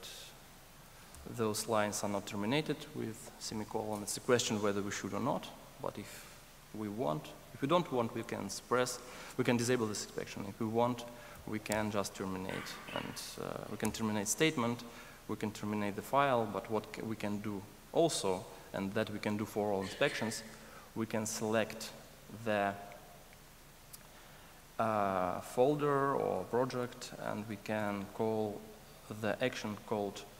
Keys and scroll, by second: 1.1 alt+Return, 27.8 ctrl+shift+super+a.